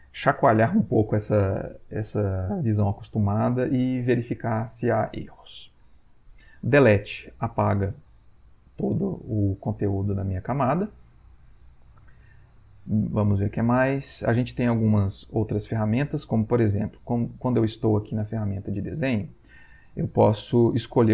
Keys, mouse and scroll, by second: 7.0 Delete.